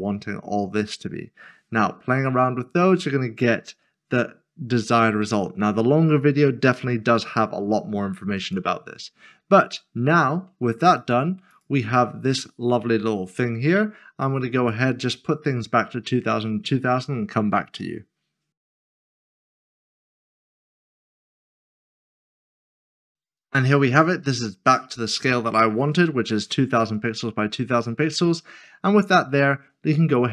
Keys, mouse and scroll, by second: 8.4 click, 11.0 click, 18.5 click, 18.7 typing, 18.7 click, 18.9 Return, 19.2 click, 20.9 click, 21.1 scroll down 1, 21.8 click, 22.2 click, 22.5 click, 24.0 scroll down 1, 27.0 click.